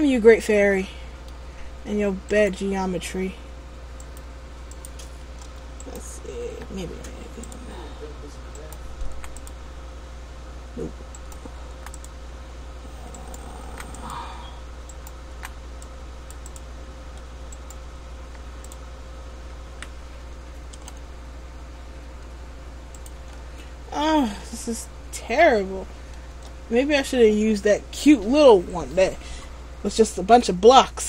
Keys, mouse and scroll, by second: 2.5 right click, 4.2 click, 6.0 right click, 6.6 Delete, 8.7 right click, 9.1 Delete, 11.3 right click, 11.8 Delete, 13.3 right click, 13.7 Delete, 15.1 right click, 15.5 Delete, 17.7 right click, 18.3 Delete, 21.0 r, 23.3 ctrl+z, 24.7 ctrl+z, 26.5 Tab, 27.5 middle click, 29.7 scroll down 2, 30.4 Tab, 30.9 scroll up 1.